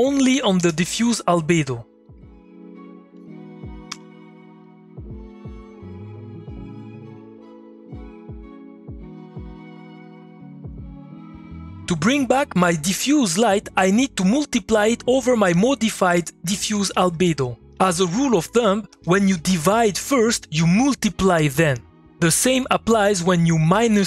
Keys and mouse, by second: 0.0-0.1 typing, 0.5 Return, 2.0 click, 3.9 2, 4.3 click, 7.4-11.7 drag, 15.5 click, 15.7 Tab, 16.3-17.8 typing, 17.9 Down, 18.9 Return, 20.4-22.7 drag, 23.5 ctrl+click.